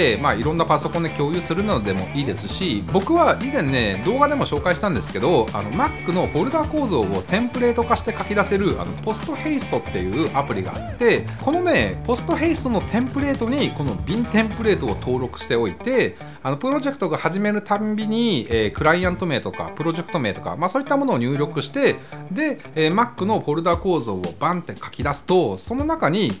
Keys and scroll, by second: 20.5 Return.